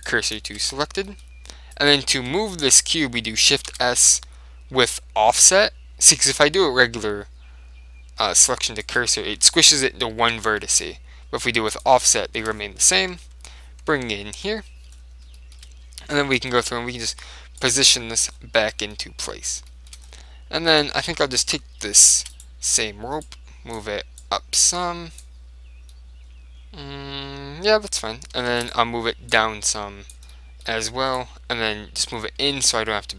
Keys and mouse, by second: 0.5 middle click, 0.8 Tab, 1.9 middle click, 1.9 right click, 2.3 Tab, 2.9 right click, 3.6 right click, 3.8 shift+s, 10.3 ctrl+z, 10.8 shift+s, 12.2-13.9 drag, 13.2 KP_7, 14.3 ctrl+KP_7, 14.9-17.1 middle drag, 16.6 r, 18.1-19.3 middle drag, 18.8 Tab, 20.8-22.5 right drag, 22.3 shift+d, 22.5 right click, 22.6 click, 22.6 middle click, 23.3-26.0 drag, 23.3 right click, 26.0-27.9 middle drag, 28.6 shift+d, 28.8-30.5 right drag, 29.4 click, 30.4 middle click, 31.1 middle click, 31.3 click, 31.3 middle click, 32.0 click, 32.0 middle click, 32.6 click, 32.6-33.1 middle drag.